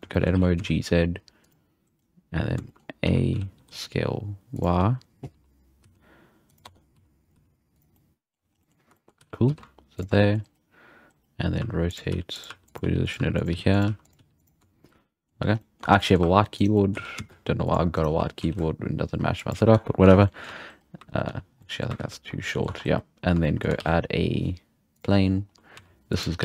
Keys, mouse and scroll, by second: 0.0 scroll down 1, 0.1 shift+middle click, 0.4 g, 2.4 scroll down 4, 2.7 shift+middle click, 2.8 scroll up 1, 3.0 a, 3.2-3.6 scroll down 2, 3.6 s, 5.4 s, 6.6 Tab, 7.0 s, 7.4 g, 8.0-8.6 middle drag, 8.6-8.9 scroll up 2, 8.9 shift+middle click, 9.2 g, 10.2 middle click, 11.6-14.4 typing, 14.8-15.6 middle drag, 15.6 scroll up 2, 15.6 middle click, 15.8 Tab, 16.0 middle drag, 16.2 2, 16.6 right drag, 16.8 middle click, 17.0 g, 18.0 right click, 18.2 g, 19.8 scroll down 1, 19.8 middle drag, 20.1 alt+a, 20.3-20.7 middle drag, 21.1 ctrl+z, 21.4 ctrl+z, 21.6-22.0 middle drag, 22.0 ctrl+z, 22.5 middle click, 22.6 Tab, 23.4-24.6 shift+middle drag, 23.8 shift+a, 25.0-26.4 typing, 25.3-25.8 scroll down 6.